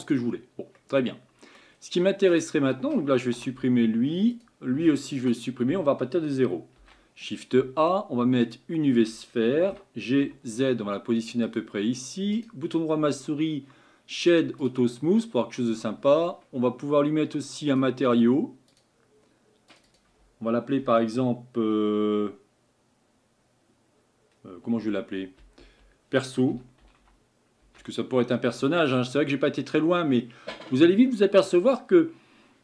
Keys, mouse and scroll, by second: 0.8-3.3 middle drag, 3.3 Delete, 5.2 Delete, 13.4-16.2 right drag, 17.7-18.4 drag, 18.8-24.1 drag.